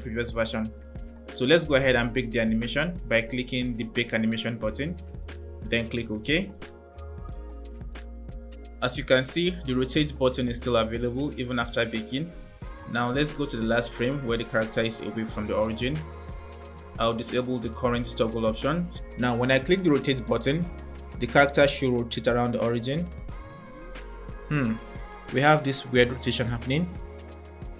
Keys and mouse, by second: 3.7-7.9 drag, 8.0 click, 14.6 click, 17.0 click, 20.5-21.0 drag, 27.2 click.